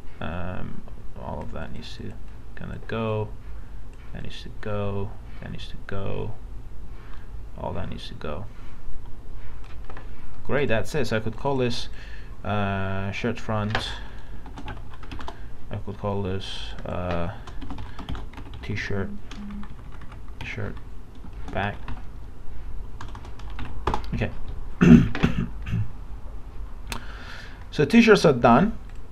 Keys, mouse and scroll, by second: 14.2-15.6 typing, 16.5 click, 17.7-18.4 typing, 21.2-23.2 typing, 28.1 click.